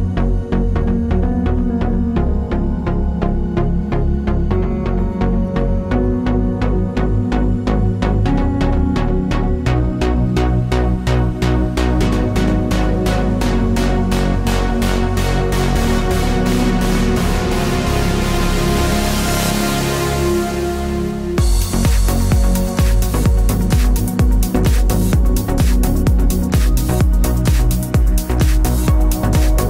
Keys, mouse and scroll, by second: 2.2 click, 2.9 KP_7, 3.1 KP_0, 3.3 KP_Enter, 4.3 click, 4.7 KP_3, 4.9 KP_5, 5.1 KP_Enter, 8.2 KP_Enter, 9.6 KP_8, 9.7 KP_0, 9.9 KP_Enter, 11.5 click, 12.5 click, 13.5 v, 13.7 click, 14.9 d, 16.2 click, 20.1 KP_2, 20.6 KP_Enter, 22.7 click, 23.7 ctrl+], 24.5 ctrl+t, 25.5 click, 28.9 Return.